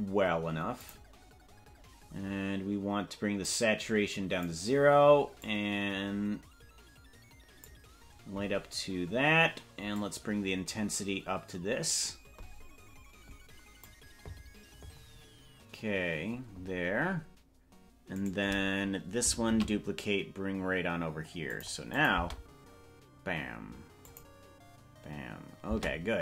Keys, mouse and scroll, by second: 0.8 click, 9.9-13.9 drag, 18.3 right click, 19.7 shift+d, 22.1 click, 22.4 space, 24.1 click, 25.9 space.